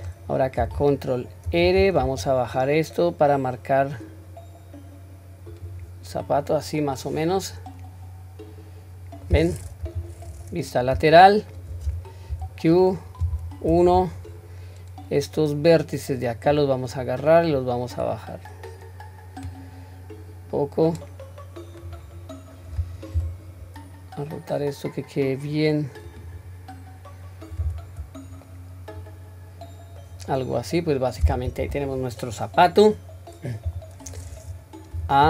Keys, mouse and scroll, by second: 1.5 ctrl+r, 6.1-8.2 scroll down 2, 6.5-9.4 middle drag, 9.8 KP_3, 10.3-11.0 scroll up 1, 11.1-11.7 shift+middle drag, 11.1-11.7 scroll up 1, 12.3 q, 13.3 1, 14.2-16.5 drag, 17.5 click, 17.8-22.0 drag, 28.0-28.6 scroll down 2, 28.5-30.1 middle drag, 30.3-31.8 middle drag, 33.7 KP_3, 34.9 a.